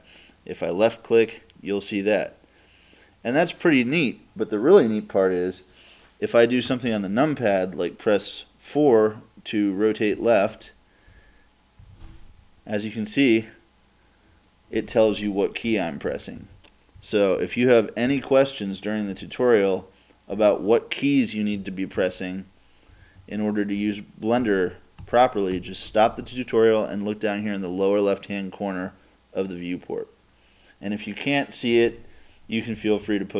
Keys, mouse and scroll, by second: 0.9-2.7 drag, 10.2 KP_4, 10.5 KP_4, 11.1 KP_4, 11.8 KP_4, 15.7-18.1 typing, 19.1 KP_8, 20.3 KP_8, 21.6 KP_4, 22.0 KP_4, 22.9 KP_Subtract, 23.2 KP_Subtract, 23.8 KP_Add, 24.4 KP_Add, 25.1 KP_Add, 25.5 KP_Add, 32.8 KP_4, 33.1 KP_4.